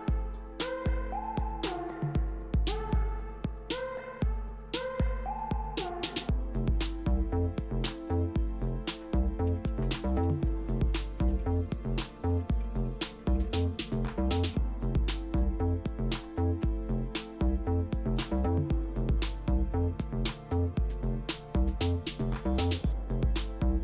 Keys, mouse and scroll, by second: 6.2 click, 6.6 click, 8.0-9.5 drag, 9.3-17.4 typing, 18.4-19.2 typing, 20.6 click.